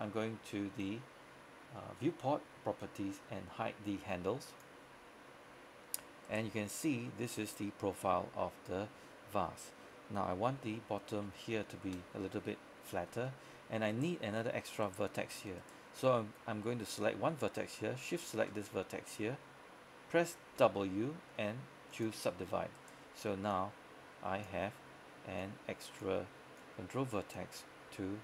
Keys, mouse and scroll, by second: 4.6 click, 5.9-6.3 scroll up 1, 6.3 right click, 9.3-10.1 scroll up 1, 10.1-10.6 scroll down 1, 10.8 shift+middle click, 11.4 scroll up 1, 11.7 shift+middle click, 13.1 scroll up 1, 13.4 shift+middle click, 14.0 right click, 18.1 shift+right click, 20.6 shift+w, 22.0 click, 22.8 right click, 23.6-27.7 drag.